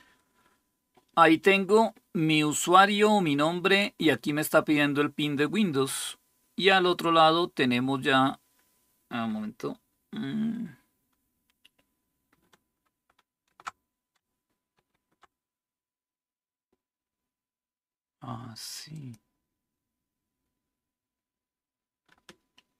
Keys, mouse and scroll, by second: 18.7 ctrl+click.